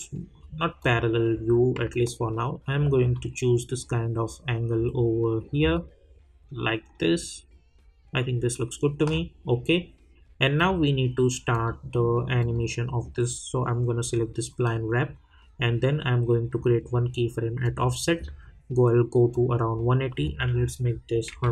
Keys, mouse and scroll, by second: 1.4-1.8 scroll up 1, 1.9 alt+click, 3.1 alt+middle click, 4.3 alt+scroll up 1, 4.9 alt+right click, 5.7-10.5 alt+middle drag, 10.5 click, 17.6 click.